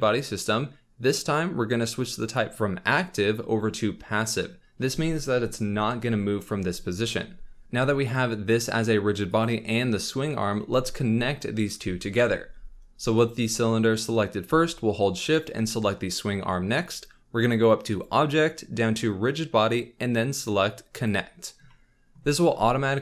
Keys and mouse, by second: 9.3 click, 13.1 click, 18.1-21.1 drag.